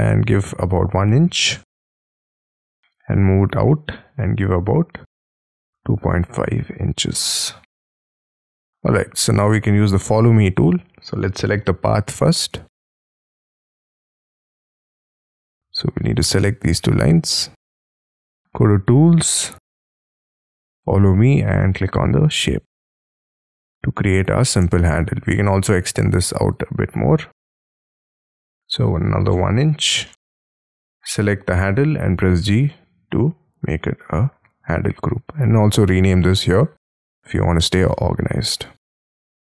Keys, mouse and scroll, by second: 0.8 1, 1.2 shift+', 1.5 Return, 2.3 middle click, 5.5-6.6 typing, 7.1 Return, 8.0 middle click, 8.3 space, 8.6-8.9 scroll up 6, 8.9 middle click, 12.9 ctrl+click, 14.0 ctrl+click, 17.2 ctrl+click, 22.8 middle click, 25.0 space, 28.6 1, 29.0 shift+', 29.7 Return, 29.7 space, 29.9 scroll up 1, 30.0 middle click, 30.9 double click, 31.3-32.2 scroll down 7, 32.2 g, 32.7 middle click, 37.7-39.3 typing.